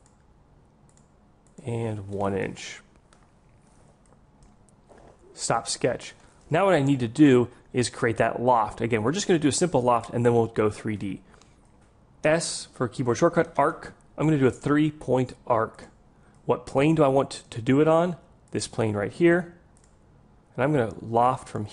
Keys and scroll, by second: 12.7 s.